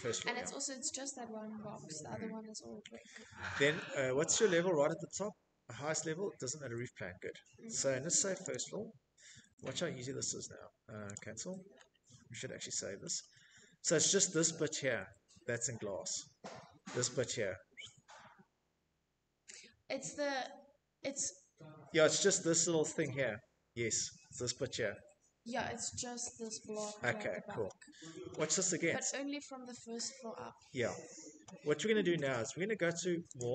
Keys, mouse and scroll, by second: 1.8-2.4 scroll, 3.5-4.5 scroll, 5.0 middle click, 6.5 click, 6.7 click, 8.1 click, 8.2 click, 8.3 click, 9.3 click, 9.3-11.1 scroll, 11.1-12.2 scroll, 12.2 middle click, 25.3 scroll, 28.9-30.3 scroll, 31.5 click, 32.4 click, 32.9 click.